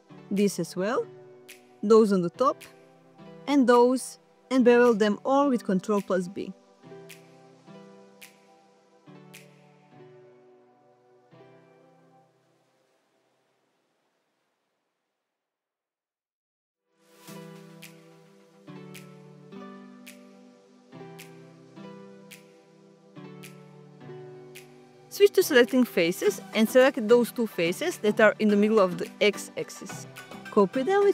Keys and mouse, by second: 2.5 alt+shift+click, 4.0 middle click, 5.4 alt+shift+click, 6.1 alt+shift+click, 6.6 middle click, 10.1 alt+shift+click, 10.7 middle click, 11.9 middle click, 12.7 ctrl+b, 25.9 click, 27.1 click, 27.6 shift+click, 30.3 shift+d.